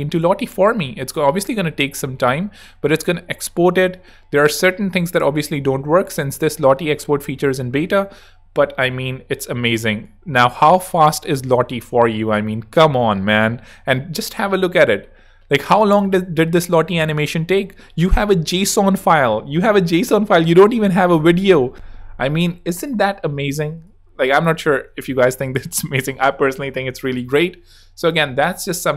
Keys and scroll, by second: 21.7 super+w, 24.9 super+w.